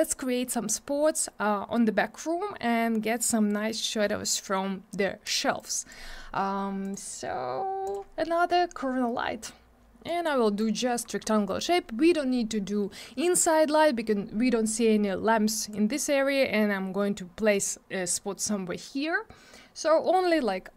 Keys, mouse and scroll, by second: 5.5 click, 6.8 click, 7.8 click, 10.0 click, 10.4 middle click, 10.5 double middle click, 10.7-11.2 scroll down 1, 11.4 middle click, 11.8 scroll up 1.